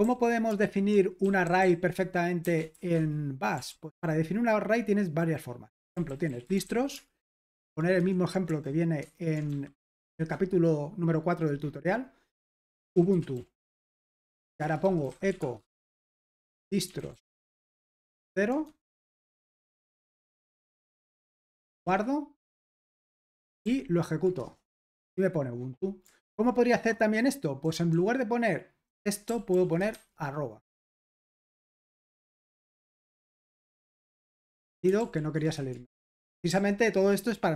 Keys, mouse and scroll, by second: 0.0 typing, 0.6 super+l, 1.2-2.7 typing, 5.9-10.0 typing, 12.5-21.9 typing, 19.8 Escape, 22.7 Return, 23.1 super+h, 23.6 ctrl+p, 24.4 Return, 26.2 super+l, 27.9-31.2 typing, 32.1 Delete, 32.5 Escape, 32.7-33.7 typing, 34.1 super+h, 35.0 ctrl+p, 35.4 Return, 35.8 super+l, 36.5 ctrl+p.